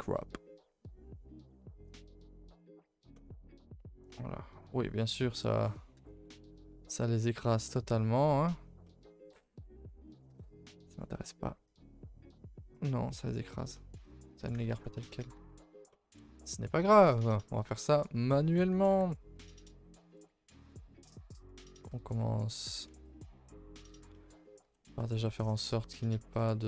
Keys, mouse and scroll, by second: 1.8 click, 4.1 middle click, 5.0 scroll up 2, 5.2-5.9 middle drag, 5.9 KP_0, 8.8-9.3 middle drag, 9.3-10.4 scroll up 5, 10.1 shift+middle click, 11.6-13.7 drag, 13.7-14.0 shift+middle drag, 14.0 scroll down 2, 15.8-17.1 middle drag, 17.1 KP_3, 17.8 shift+middle click, 18.0-18.6 scroll up 2, 18.7 g, 20.5 r, 21.7 middle click, 22.6 r, 24.1 middle click, 24.6 r, 26.6 middle click.